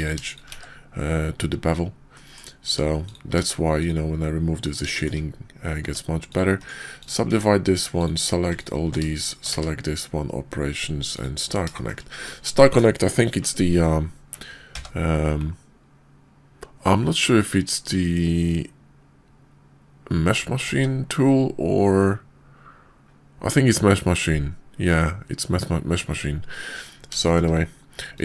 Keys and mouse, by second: 0.5 1, 2.1 click, 2.6 Tab, 3.0 click, 3.2 x, 4.9 shift+click, 5.8 Tab, 6.2 click, 6.6 click, 7.3 Tab, 8.0 click, 9.2 shift+click, 9.4 q, 14.6 y, 20.6 q, 27.3 shift+click, 28.0 click.